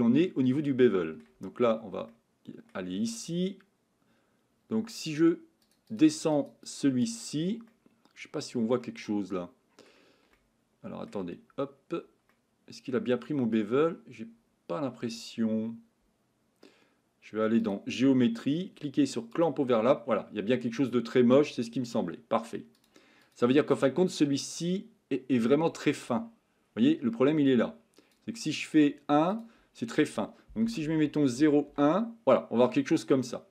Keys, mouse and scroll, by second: 2.1-2.7 shift+middle drag, 6.1 click, 6.3 click, 6.6 click, 7.7-8.8 middle drag, 9.1-9.9 middle drag, 10.3-11.1 shift+middle drag, 12.3 middle click, 17.6 click, 19.4 click, 23.2 click, 23.8 click, 24.4 click, 29.3-31.7 drag.